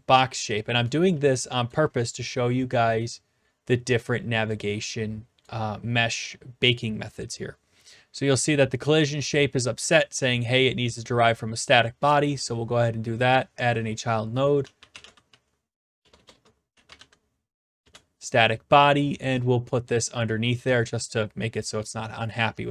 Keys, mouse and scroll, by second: 1.6 typing, 1.7-2.8 right drag, 4.5 click, 4.8-5.4 typing, 5.4 right click, 12.2 right click, 13.3 click, 14.4-17.4 typing, 17.8 Return, 20.0 click.